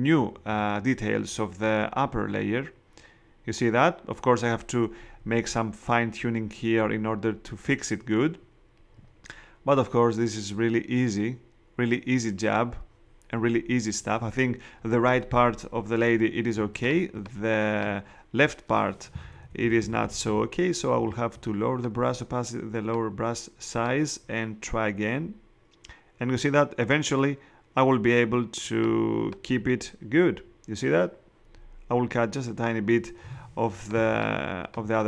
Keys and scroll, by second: 16.5 space, 19.2 [, 33.9 space.